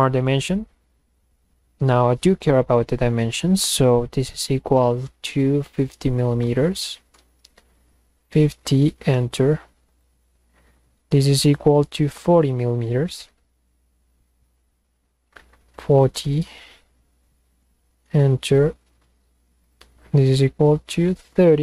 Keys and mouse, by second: 0.8 click, 2.8 click, 7.2 Return, 9.9 click, 11.6 drag, 16.2 Return, 19.7 drag, 21.2 click.